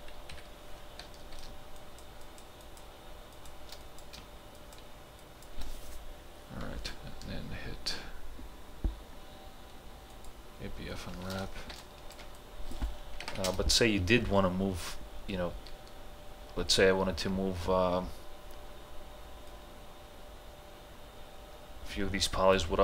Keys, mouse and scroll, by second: 0.3 Right, 1.8 shift+click, 4.6 shift+click, 10.1 click, 11.8-13.3 ctrl+alt+drag, 13.3 ctrl+h, 13.5 space, 19.5 space, 19.5-22.8 drag.